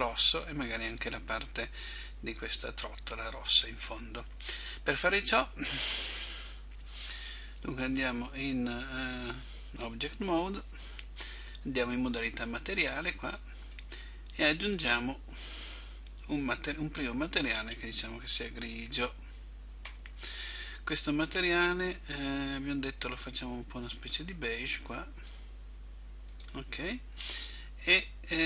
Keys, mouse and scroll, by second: 2.0 middle click, 7.7 Tab, 13.3 click, 14.6 click, 17.4 click, 21.9 click.